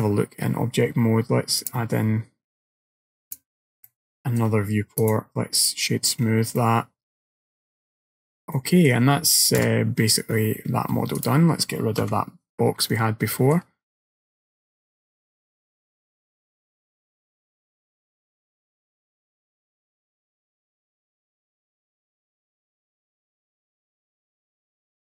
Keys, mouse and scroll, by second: 1.7 click, 3.3 click, 3.9 middle click, 4.5-5.0 scroll down 1, 5.1 right click, 6.3-7.4 scroll down 3, 6.6 middle click, 8.2-8.6 scroll down 2, 8.6 middle click, 11.2 click, 12.1 Delete, 12.9 middle click.